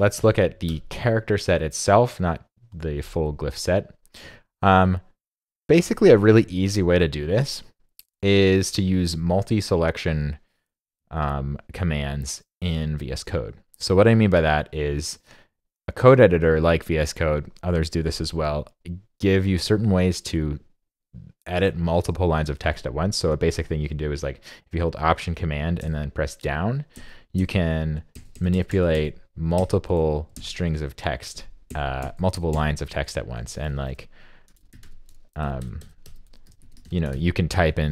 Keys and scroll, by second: 0.2 super+BackSpace, 25.8 alt+super+Down, 26.9 alt+super+Page_Down, 29.6 super+Right, 30.3 super+Left.